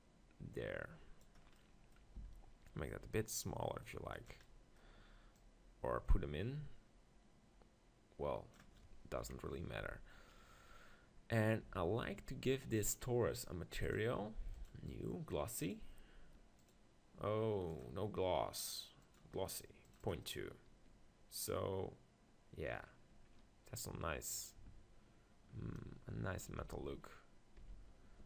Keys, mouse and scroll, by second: 1.5-3.4 middle drag, 2.2 s, 4.3-8.5 drag, 9.2 KP_7, 9.8 z, 10.4-12.9 middle drag, 11.7 g, 12.9-22.5 drag, 22.7-26.6 middle drag, 27.6 Tab.